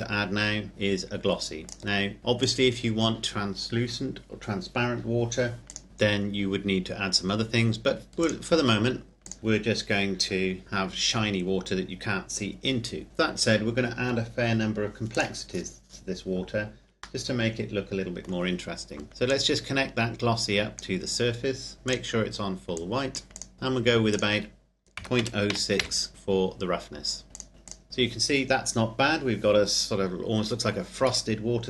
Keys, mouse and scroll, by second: 1.9 click, 8.3 click, 15.1 click, 15.5-17.2 scroll down 1, 17.2 middle click, 19.3 click, 23.5-24.1 scroll up 1, 24.1 click, 25.0 KP_Decimal, 25.2 KP_0, 25.5 KP_6, 25.7 KP_Enter, 27.3 click.